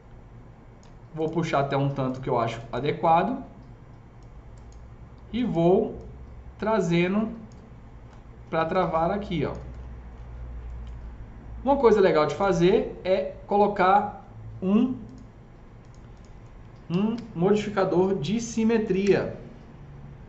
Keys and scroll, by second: 16.6-17.5 typing, 18.9 Return.